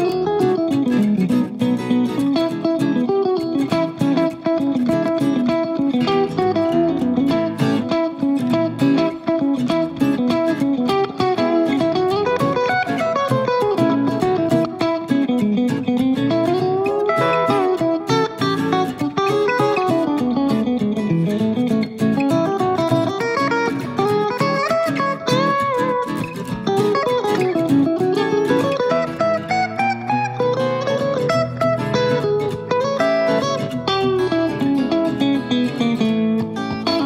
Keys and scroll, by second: 14.6 d, 22.3-23.0 typing, 32.7 super+d.